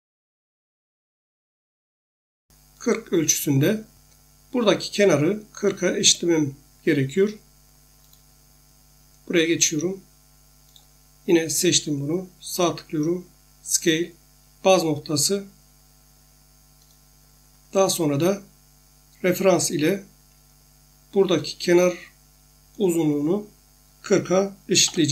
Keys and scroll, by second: 24.8-25.1 typing.